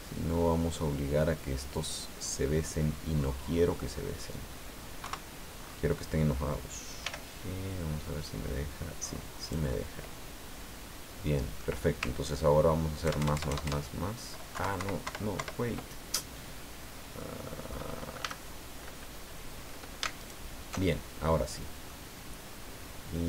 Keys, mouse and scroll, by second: 4.1-5.0 scroll down 2, 5.0 KP_1, 5.5-5.9 scroll up 2, 7.0 g, 9.4-11.8 drag, 13.0 ctrl+KP_Add, 14.5 ctrl+KP_Subtract, 17.2 click, 18.2 a, 20.2 alt+shift+right click, 21.3 scroll down 2, 21.8-23.2 drag.